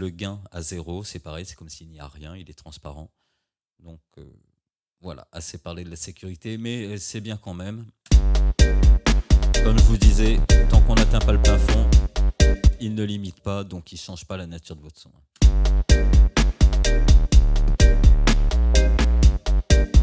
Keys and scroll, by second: 8.1 space, 12.7 space, 15.4 space.